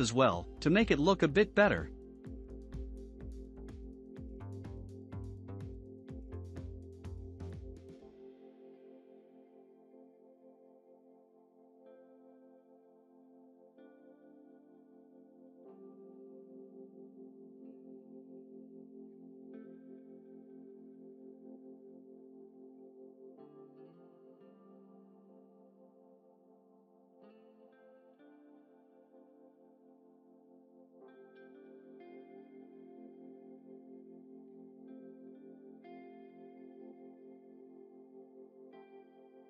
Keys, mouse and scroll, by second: 2.4-2.9 scroll down 1, 2.9-5.1 middle drag, 7.1-8.3 shift+middle drag, 8.3 KP_Decimal, 9.1-9.6 scroll down 1, 9.6-10.5 shift+middle drag, 10.5 click, 12.3 s, 16.6-17.9 middle drag, 17.9-18.3 scroll up 4, 18.6-24.3 middle drag, 24.3-24.9 scroll up 5, 24.9-26.4 middle drag, 26.4 click, 28.0-30.0 shift+middle drag, 30.5-31.3 scroll up 2, 31.3 click, 34.0-34.3 scroll down 3, 34.3-36.4 shift+middle drag, 36.9 Tab, 36.9 3, 37.1 click, 37.6 scroll down 2, 37.9-39.4 shift+middle drag.